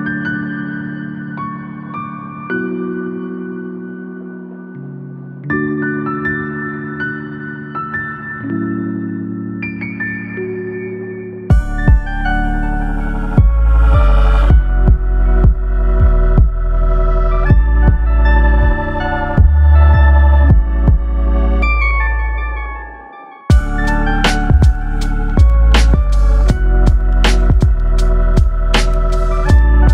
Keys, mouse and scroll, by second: 0.1 click, 2.5 right click, 3.8 ctrl+r, 10.0 click, 10.6 g, 11.5 click, 11.7 g, 12.7 click, 12.9 g, 15.3 shift+middle click, 15.7-16.0 scroll down 4, 18.9-19.9 scroll up 1, 19.9 click, 20.7 g, 22.7 click, 23.6 g, 24.0 click, 24.2 g, 28.3 2, 28.5 click, 29.4 e.